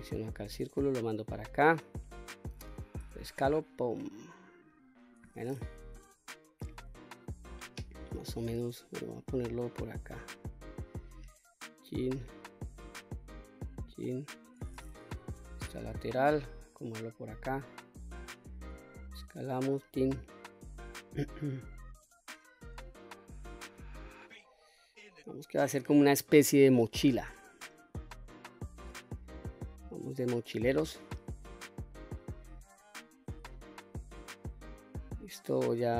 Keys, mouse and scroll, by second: 0.1-0.7 drag, 1.4-1.8 drag, 2.5 s, 3.9 click, 5.4 KP_1, 7.0 click, 8.1-9.2 drag, 10.0-11.4 drag, 12.0 click, 14.5 KP_3, 15.2-16.1 scroll up 2, 16.1-17.0 drag, 18.1 s, 19.1 click, 19.8 click, 20.7-22.2 scroll up 2, 22.3-22.8 shift+middle drag, 23.8 click, 25.5-26.6 drag, 27.4 click, 28.7-30.3 scroll down 1, 30.9-31.4 middle drag, 31.7-32.3 scroll up 3, 32.3-32.9 middle drag, 32.7 scroll down 1, 33.1-33.7 shift+middle drag, 34.7-35.6 middle drag, 35.6 Tab.